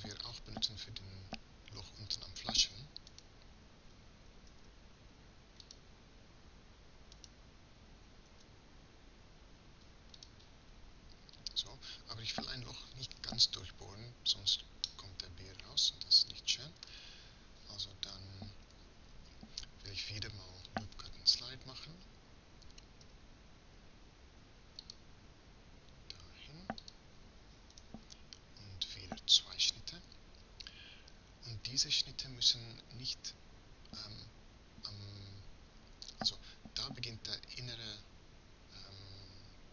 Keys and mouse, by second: 0.4-1.9 middle drag, 3.5-5.0 right drag, 4.5 shift+s, 7.6-9.0 right drag, 8.3 shift+s, 14.9-18.2 drag, 18.2 KP_1, 18.7 KP_3, 23.1 Tab, 26.6 click, 30.7-31.7 middle drag.